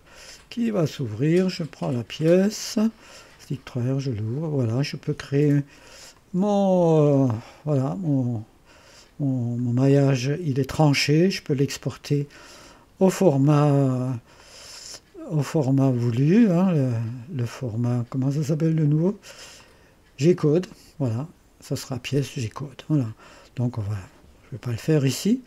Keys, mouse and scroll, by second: 0.9 click, 1.9-3.7 drag, 3.8-6.9 drag, 7.4-9.4 drag, 9.4-9.9 scroll up 2, 9.9-12.0 drag, 9.9-11.1 scroll up 1, 13.4-14.8 right drag, 14.4-16.7 drag, 17.1-18.2 drag, 18.9 click, 19.6 click, 20.5 click, 23.8 click.